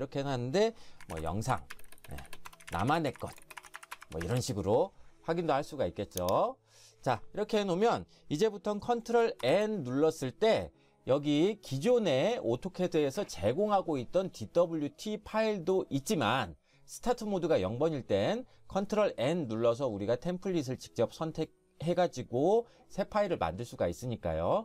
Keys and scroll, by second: 0.8-4.7 typing, 9.4 ctrl+n.